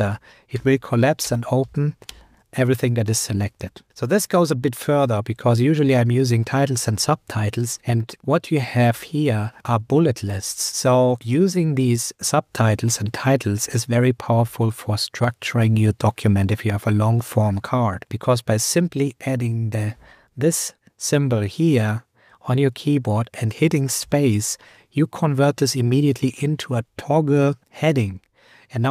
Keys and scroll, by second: 4.3 Down, 4.9 Up, 6.5 Down, 8.9 Down, 9.6 super+Return, 10.8 Up, 11.3 Up, 14.4 super+Left, 19.9 shift+., 20.0 shift+>.